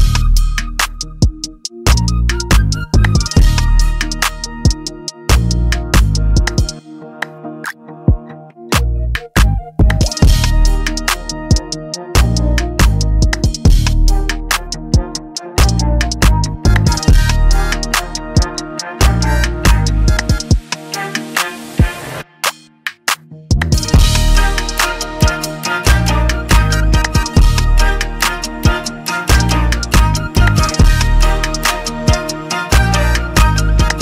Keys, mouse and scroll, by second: 0.6 click, 3.0 click, 4.2 click, 9.7 click, 11.4-13.2 scroll, 13.2 scroll, 13.3-15.1 scroll down 7, 15.1 click, 15.2 scroll, 16.5 click, 18.0 scroll down 7, 21.7 click, 22.8 click, 28.5 click.